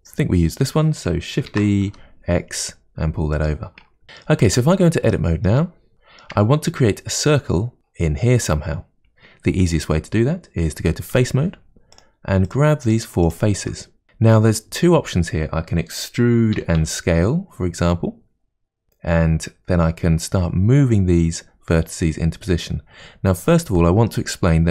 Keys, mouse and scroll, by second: 1.5 shift+d, 4.0 middle click, 4.5 Tab, 5.1 shift+middle click, 5.8 scroll up 1, 5.9-8.4 shift+middle drag, 11.1 3, 12.0 click, 12.5 shift+click, 12.9 shift+click, 13.2 shift+click, 16.6 e, 24.1-24.7 middle drag.